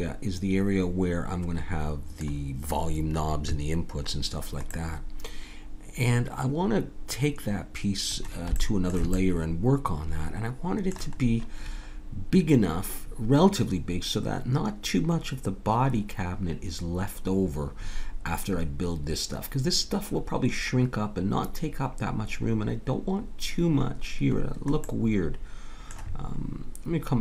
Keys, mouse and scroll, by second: 4.2 middle click, 4.7-5.8 middle drag, 8.6-11.7 middle drag, 24.4-26.9 middle drag.